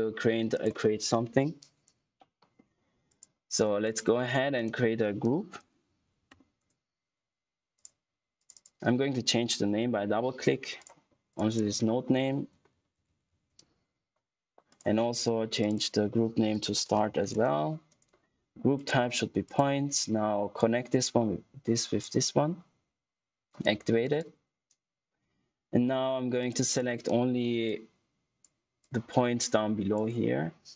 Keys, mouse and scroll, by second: 0.0-0.5 scroll up 1, 0.5 click, 3.0 click, 4.5 right click, 5.4-6.7 typing, 7.7 click, 10.7 click, 12.2-13.7 typing, 14.6 click, 16.2-17.6 typing, 18.7 click, 27.6 alt+click.